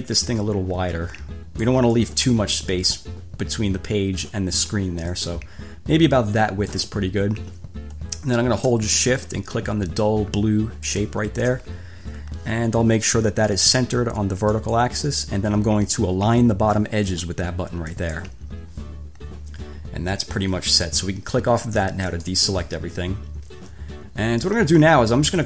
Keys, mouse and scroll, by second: 0.5-3.3 drag, 5.3-7.1 drag, 9.2-10.7 shift+middle drag, 11.0 shift+click, 11.6 shift+middle click, 14.7 click, 18.1 click, 22.3 click.